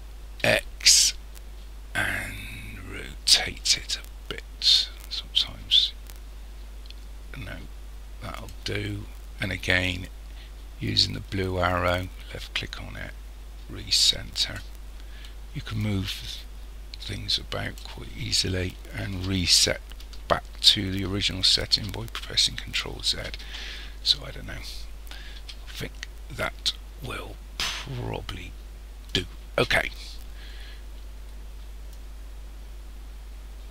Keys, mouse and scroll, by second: 9.8 click, 15.8 click, 21.4 ctrl+z, 25.4 s, 31.9 click.